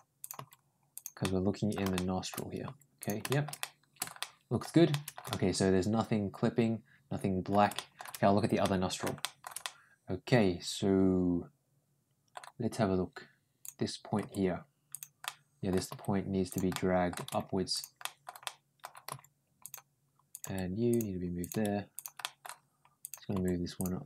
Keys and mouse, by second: 0.0 click, 0.2 g, 1.0 middle click, 1.8 middle click, 2.5 g, 3.1 middle click, 3.4 middle click, 4.0 middle click, 4.7 middle click, 5.1-7.3 middle drag, 7.6 shift+middle click, 8.4 middle click, 9.0 shift+middle click, 9.4-12.2 middle drag, 13.4 click, 14.0 g, 15.1 middle click, 15.7 g, 16.5 middle click, 17.0 g, 17.8 middle click, 18.3 middle click, 18.9 g, 20.1 click, 20.7 g, 21.2 click, 21.8 g, 22.0 middle click, 22.8 click, 23.2 g.